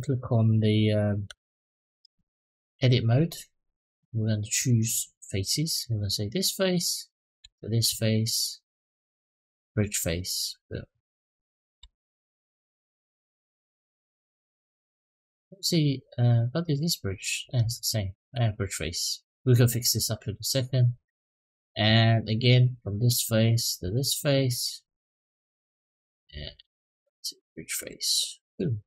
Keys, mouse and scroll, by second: 0.3 middle click, 1.1 Tab, 3.4 click, 4.3 click, 5.6 click, 6.0 middle click, 7.3 shift+click, 8.1-9.6 right drag, 10.0 click, 10.4 middle click, 11.8 ctrl+z, 12.7 middle click, 14.1 ctrl+z, 14.9-16.5 right drag, 17.3 ctrl+z, 18.0-20.8 right drag, 21.1 middle click, 22.3 click, 23.0 middle click, 23.8 shift+click, 24.3-27.7 right drag, 28.2 middle click, 28.6 click.